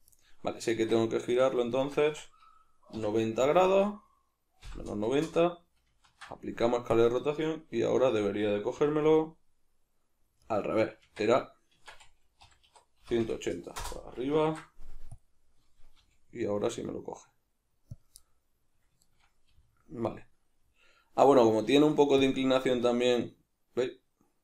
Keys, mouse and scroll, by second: 0.2 right click, 0.8 Tab, 1.3 a, 1.8-10.6 shift+middle drag, 2.1 Tab, 3.0 r, 5.4 Return, 6.1 ctrl+a, 8.8 g, 10.6 right click, 11.0 Tab, 12.4 r, 13.8 Return, 14.4 ctrl+a, 16.0 g, 18.0 click, 18.2-20.1 middle drag, 19.5 r, 20.1 right click, 21.2 g, 22.3 click, 22.7 g.